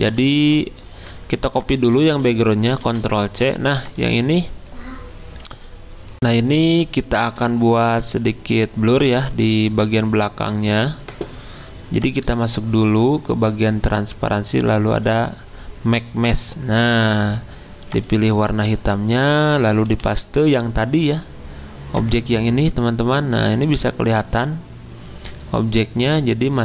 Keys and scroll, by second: 0.0 ctrl+z, 2.1 ctrl+z, 2.8 ctrl+c, 6.1 F9, 19.9 ctrl+f.